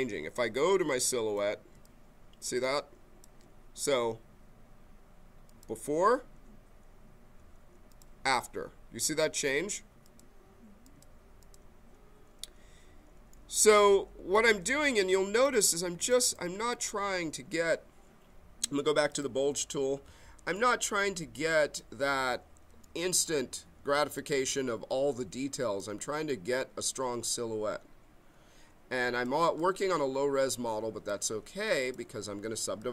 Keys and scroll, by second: 20.3 b, 32.6 b.